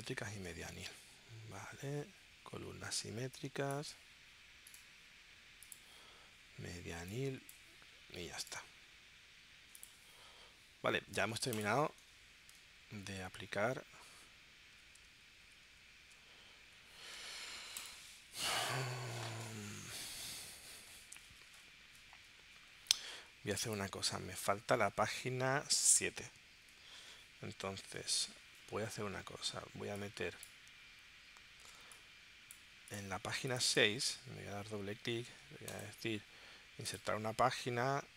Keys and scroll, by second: 0.3 super+Tab.